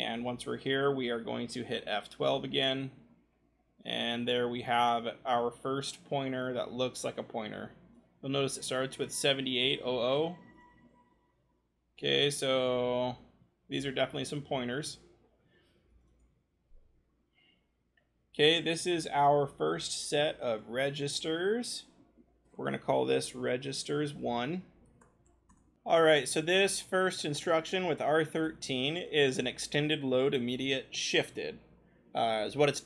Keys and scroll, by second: 0.6 v, 2.6 scroll, 9.4-10.6 scroll, 10.6 F12, 11.5-12.7 scroll, 13.2-13.7 scroll, 14.5-15.9 scroll, 15.9 scroll, 22.5-24.8 typing, 25.5 Return.